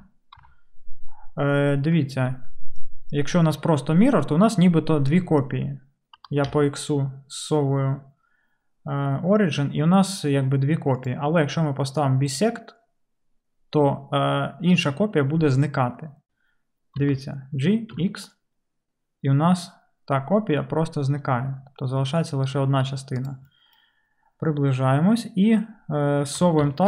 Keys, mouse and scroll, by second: 0.0 ctrl+., 0.4 ctrl+., 6.2 g, 12.4-26.4 middle drag, 17.0 g, 26.4 g.